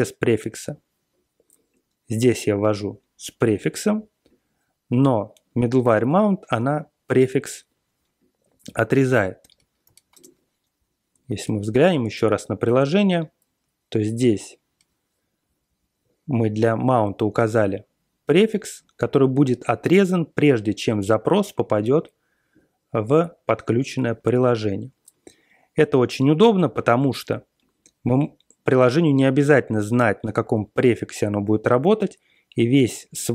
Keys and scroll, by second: 8.7 ctrl+x, 8.9-10.1 typing, 11.6 Page_Down, 11.8 Page_Down, 12.1 ctrl+l, 12.4 ctrl+l, 13.5-14.0 Page_Down, 14.1 Page_Down, 14.1 Page_Down, 14.2 Page_Down, 14.2 Page_Down, 14.4 Page_Down, 14.4 Page_Down, 14.5 Down.